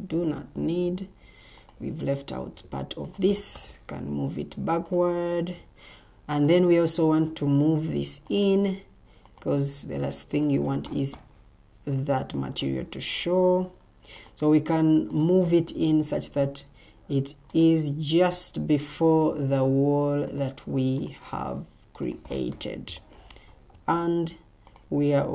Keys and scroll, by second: 18.6 Escape.